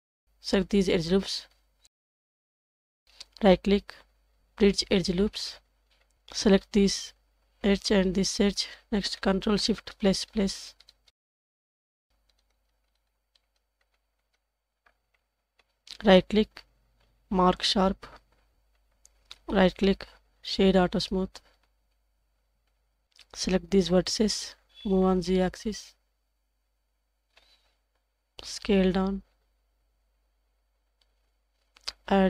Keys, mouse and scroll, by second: 0.2 alt+click, 1.2 alt+shift+click, 3.4-4.9 right drag, 6.1 Tab, 6.1 click, 7.5 scroll up 1, 7.6-8.6 middle drag, 9.2 shift+click, 10.9 ctrl+shift+KP_Add, 15.2 middle click, 16.0-17.9 right drag, 18.7 Tab, 19.4-21.9 right drag, 21.9 scroll down 1, 22.7 KP_1, 23.0 alt+z, 23.3 click, 24.8 g, 27.8 click, 28.8 s.